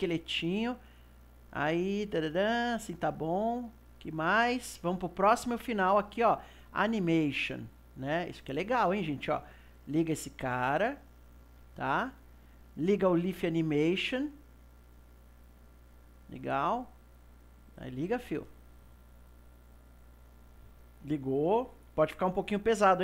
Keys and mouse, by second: 4.1-6.8 drag, 6.8-11.9 middle drag, 11.9 click.